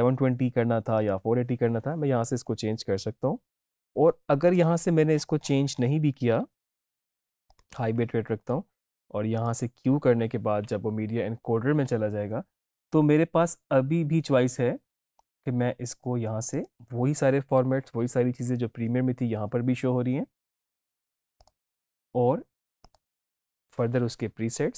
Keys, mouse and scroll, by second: 0.8 click, 1.0 click, 4.3 click, 5.0-6.6 scroll down 1, 6.6-6.9 scroll up 2, 6.6 click, 7.4 click, 16.5 click, 21.3 click.